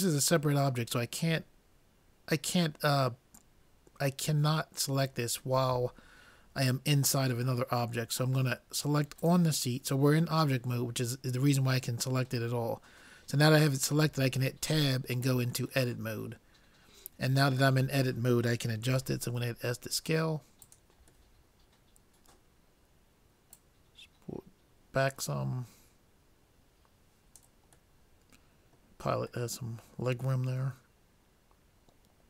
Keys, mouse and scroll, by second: 9.3-10.8 drag, 11.0 click, 19.6 s, 21.4-23.3 middle drag, 23.6-25.3 drag, 28.0-31.7 middle drag.